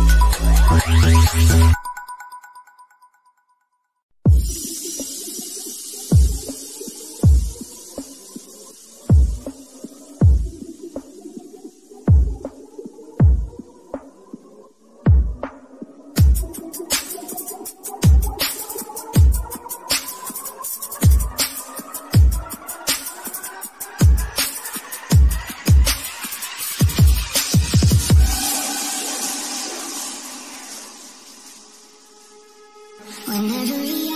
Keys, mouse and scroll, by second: 0.7 middle click, 2.3 scroll up 1, 4.2 click, 7.4 g, 7.8 click, 16.8 click, 19.2 click, 20.2-20.5 scroll down 1, 20.8-25.3 shift+middle drag, 25.3-26.1 scroll up 1, 28.8-29.4 scroll down 1.